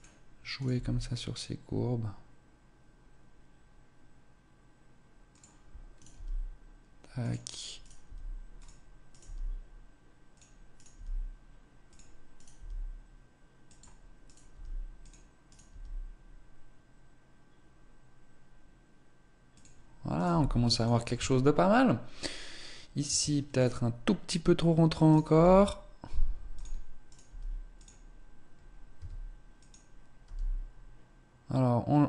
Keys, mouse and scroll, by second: 0.5 right click, 0.6 g, 5.6 right click, 5.6 g, 7.7 right click, 8.0 g, 9.0 right click, 9.2 g, 10.6 right click, 10.9 g, 11.8 click, 14.2 right click, 14.4 g, 15.4 right click, 15.6 g, 20.0 click, 20.0 right click, 20.2 g, 21.1 Tab, 21.4-22.1 scroll down 1, 22.1-22.4 scroll down 2, 23.0 Tab, 23.5 right click, 25.0 right click, 25.2 g, 26.5 click, 27.0 right click, 27.2 g, 28.8 s, 30.1 g.